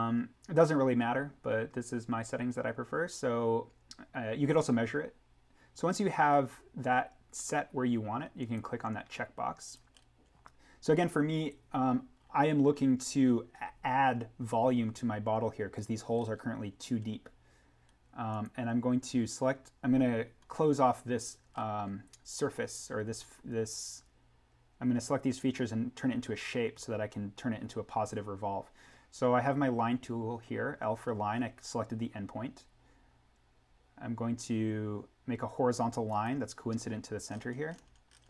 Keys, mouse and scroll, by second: 1.0-1.4 scroll down 1, 6.1-8.0 scroll down 1, 8.3 click, 9.9-10.5 scroll up 1, 12.2-14.0 scroll down 1, 16.1 scroll up 1, 18.3 click, 21.5-22.7 scroll up 1, 27.0-27.6 scroll down 1, 30.9-31.3 scroll down 1, 36.1 click, 37.2-38.2 scroll up 1.